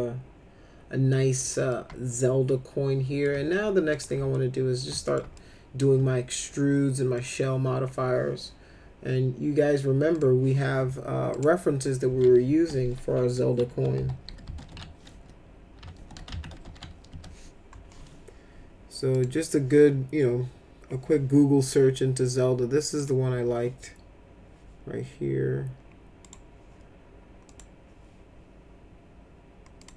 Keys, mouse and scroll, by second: 1.7-3.2 alt+middle drag, 3.9 click, 4.3 alt+middle click, 5.0 middle click, 5.3 alt+middle click, 7.2 click, 10.1 click, 11.3 click, 13.4-16.7 typing, 17.1 Return, 19.1 click, 23.0 click, 26.2 right click, 27.5 click, 29.8 click.